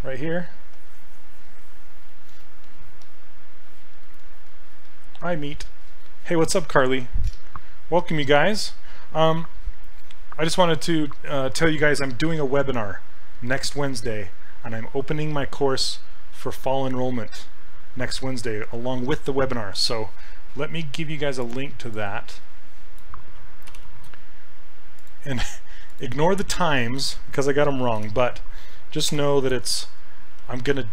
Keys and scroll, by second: 23.7 ctrl+c, 28.0 ctrl+v, 29.1 Return.